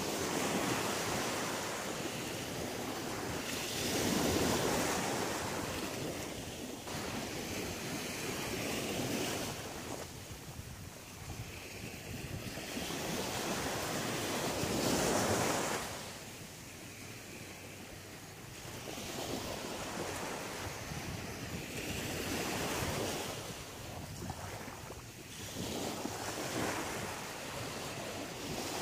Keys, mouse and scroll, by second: 0.6-1.4 scroll up 1, 1.4 right click, 1.8 shift+right click, 3.0 right click, 3.8 shift+right click, 4.9 f, 5.9 right click, 6.5 shift+right click, 7.1 right click, 7.4 shift+right click, 8.2 f, 8.7 middle click, 10.0 shift+middle click, 11.1 shift+middle click, 11.7 middle click, 13.5 right click, 13.9 shift+right click, 14.5 shift+right click, 14.8 shift+right click, 15.7 f, 16.4 right click, 16.8 right click, 17.5 right click, 17.8 right click, 18.8 f, 19.2-19.7 scroll up 2, 19.9 right click, 20.2 shift+right click, 20.8 right click, 21.2 right click, 22.0 f, 22.2-23.0 scroll down 6, 23.4 middle click, 23.9-24.5 scroll down 3, 24.7 shift+middle click, 26.0-26.4 scroll up 6, 27.0 shift+middle click, 28.4 middle click.